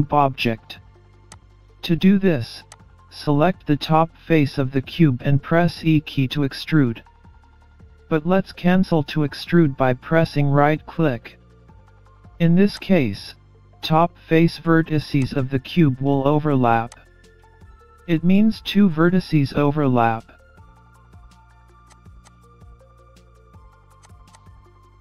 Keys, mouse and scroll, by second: 2.3 Tab, 4.9 click, 6.4 click, 7.8 middle click, 9.9 e, 14.6 middle click, 16.4 click, 17.1-18.0 scroll up 2, 18.9 click, 21.9 middle click, 23.9 middle click, 24.9 scroll down 3.